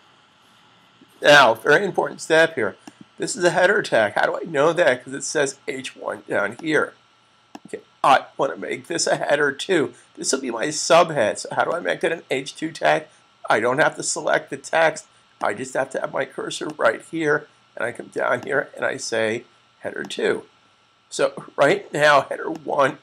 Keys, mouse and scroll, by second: 2.7 click, 6.4 click.